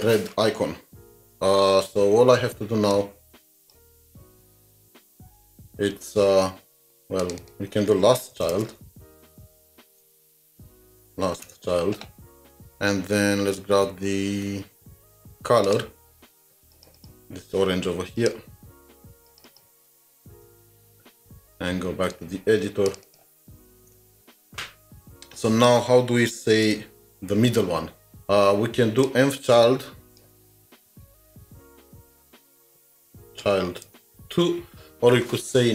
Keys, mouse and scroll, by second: 4.4 alt+shift+Down, 7.4 double click, 8.1-11.4 typing, 16.9 typing, 17.0 double click, 19.5 double click, 20.2 ctrl+a, 20.5 ctrl+c, 20.6 typing, 21.4 alt+Tab, 23.1 double click, 23.7-24.0 typing, 26.4 typing, 26.7 alt+shift+Down, 30.9-31.9 typing, 33.8 Return, 34.4 2.